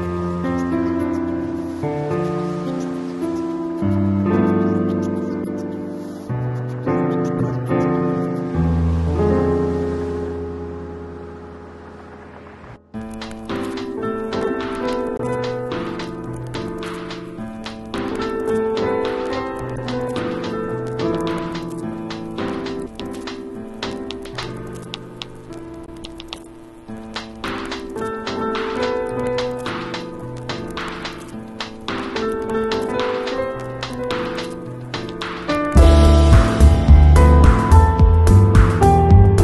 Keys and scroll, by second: 0.1 [, 1.3 ], 3.4 ], 7.8 ], 17.2-18.1 typing, 21.7 [, 23.4 ], 23.9 ], 25.2 x, 25.8 x, 26.5 x, 27.1 x, 28.3-32.7 typing.